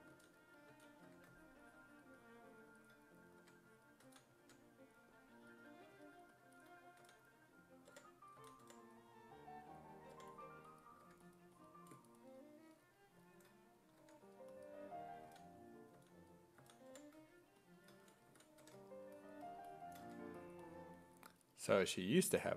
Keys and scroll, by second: 0.1 s, 0.7 s, 1.1 1, 4.1 s, 4.4 1, 7.0-11.1 typing, 14.0 1, 15.3 s, 16.0 s, 16.6 s, 16.9 5, 18.3 ctrl+z, 18.6 1.